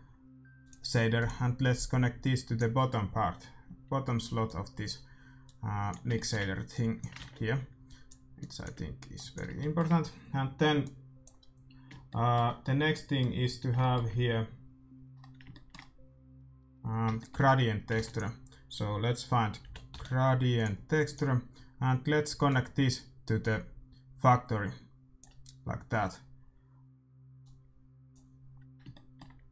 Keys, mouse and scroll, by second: 1.7-3.5 drag, 4.4-11.0 drag, 6.1-8.0 middle drag, 7.1 ctrl+s, 9.5-13.8 middle drag, 17.1-20.5 middle drag, 17.9 shift+a, 22.4-24.3 drag, 27.4-29.1 drag, 28.8 shift+w.